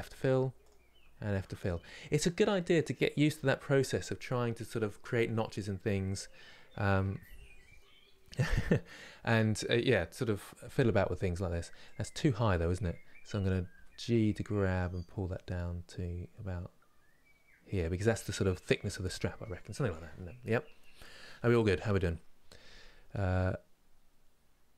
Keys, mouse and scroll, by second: 0.3 click, 1.3 f, 1.6 scroll down 1, 2.1 middle click, 2.9 scroll down 2, 12.0 click, 13.4 g.